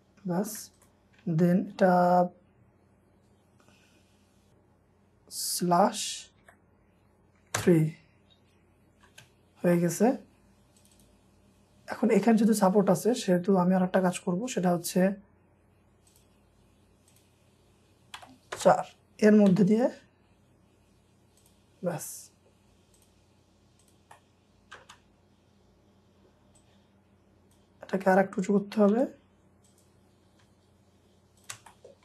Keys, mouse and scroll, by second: 0.4 scroll up 1, 0.8 ctrl+click, 1.6 shift+scroll down 1, 4.5 typing, 6.4 typing, 7.6 Return, 8.8 scroll up 1, 9.1 space, 9.3 scroll up 1, 9.8 middle click, 10.3-10.9 scroll up 1, 10.9 double click, 11.5 scroll up 1, 13.9 scroll down 1, 18.2 typing, 18.6 Return, 19.5 typing, 20.0-20.4 scroll down 1, 22.0-23.8 scroll up 1, 24.1 middle click, 24.8 space, 25.5 scroll down 1, 27.8 scroll up 1, 28.9 typing, 29.0 scroll up 1, 30.4 m, 31.4 shift+click, 31.7 shift+middle click.